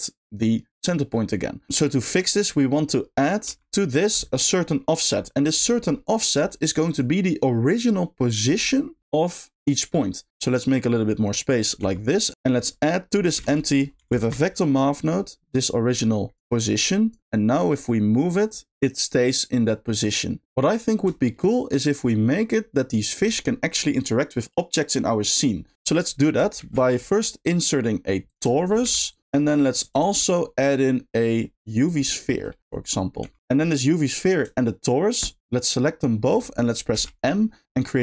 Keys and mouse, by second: 1.7 middle click, 2.4-3.2 drag, 5.6 click, 5.6 g, 6.0 middle click, 7.0 click, 8.7 middle click, 9.0 shift+d, 9.6 middle click, 10.6 click, 11.5 click, 12.3 click, 12.3 g, 12.3 x, 12.5 middle click, 13.4 shift+a, 15.6 click, 15.7 click, 16.4 click, 18.4 click, 20.0-21.2 drag, 21.2 shift+middle click, 26.6 shift+a, 28.5 shift+middle drag, 28.8 g, 29.1 click, 29.2 r, 30.0 shift+a, 32.2 shift+middle click, 32.6 click, 32.6 g, 32.8-33.2 middle drag, 33.2 g, 35.2 shift+click.